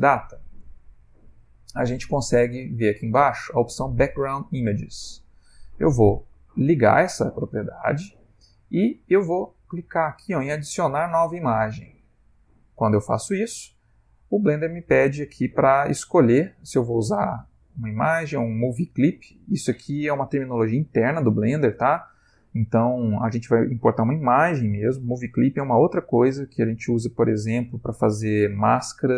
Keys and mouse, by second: 2.9 middle click, 6.8 middle click, 6.8 click, 7.9 click, 8.3 middle click, 11.8 click, 12.6 middle click.